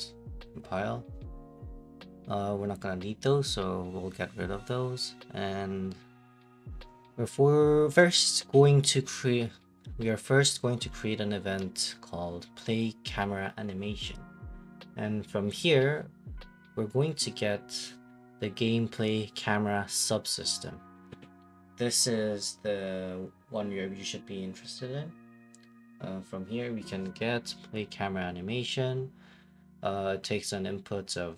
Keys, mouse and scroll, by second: 0.0 click, 0.3 click, 1.1 click, 1.4 click, 2.7 click, 3.0 middle click, 3.4 click, 4.1 Delete, 5.0 click, 5.9 right click, 6.4-13.6 typing, 14.2 scroll, 14.3 middle click, 14.9 right click, 16.5-19.9 typing, 17.1 scroll, 20.5 click, 21.7 click, 23.2 click, 26.4-27.5 typing, 27.8 Return, 30.7 click, 31.0 right click, 31.0 typing.